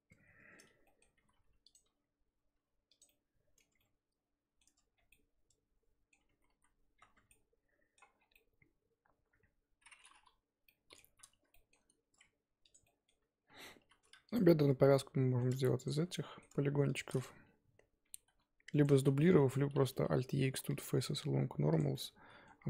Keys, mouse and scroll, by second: 1.2 r, 1.8 g, 3.0-4.6 middle drag, 4.6 Tab, 4.9 scroll down 2, 5.1-6.3 middle drag, 6.3 ctrl+z, 6.5 ctrl+z, 7.1 Tab, 7.3 middle click, 8.1 scroll down 3, 8.3-10.1 middle drag, 10.1-10.6 scroll up 1, 10.6 scroll down 1, 10.6-11.7 middle drag, 11.7 scroll up 1, 12.8 click, 12.8 middle click, 13.2 Tab, 13.5 scroll up 2, 14.3 alt+click, 14.7-15.8 middle drag, 15.8 shift+click, 16.1 middle click, 16.9 shift+click, 18.1 shift+d, 18.9 ctrl+z, 19.2-20.8 middle drag, 20.8 alt+e, 21.9-22.6 middle drag.